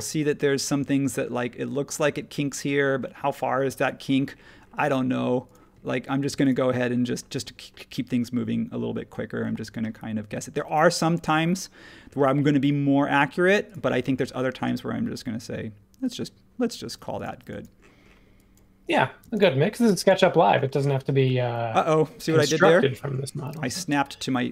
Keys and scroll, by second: 5.7 ⟲, 19.2 space, 19.9 e.